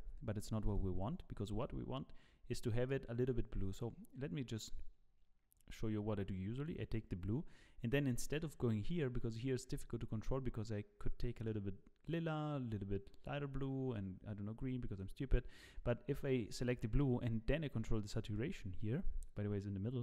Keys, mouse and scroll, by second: 0.7 click.